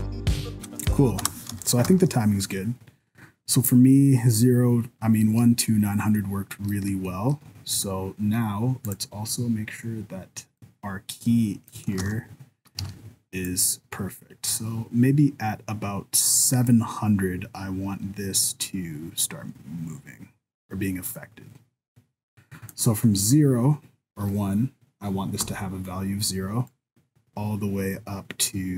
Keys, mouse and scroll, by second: 0.5 KP_0, 1.2 space, 1.9 shift+Left, 6.1-6.9 scroll up 1, 6.9 middle click, 7.1 shift+middle click, 7.7 right click, 8.8 click, 10.6 click, 12.0 ctrl+s, 12.8 alt+a, 13.5 click, 25.5 i, 26.8 click.